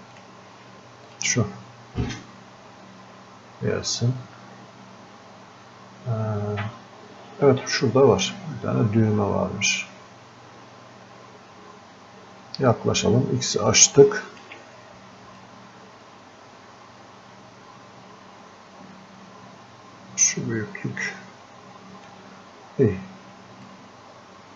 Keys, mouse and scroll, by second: 6.8 click, 12.3-12.8 scroll up 1, 12.8 scroll down 1, 14.0-15.4 alt+drag, 15.4-23.7 drag, 23.7-24.5 drag.